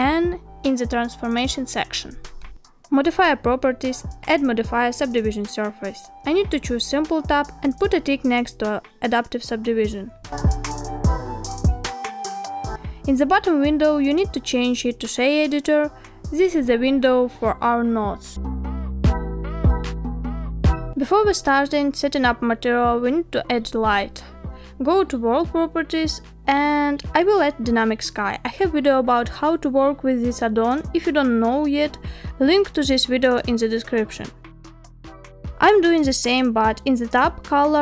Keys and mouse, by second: 2.0 click, 3.0-5.2 drag, 6.8 click, 8.9 click, 11.0-11.7 middle drag, 12.7-14.0 middle drag, 14.3-14.6 shift+middle drag, 16.6 click, 18.0-19.3 drag, 24.7 n, 26.0 click, 26.7 click, 27.4 click, 28.2 click, 31.8 n, 34.3-37.8 drag.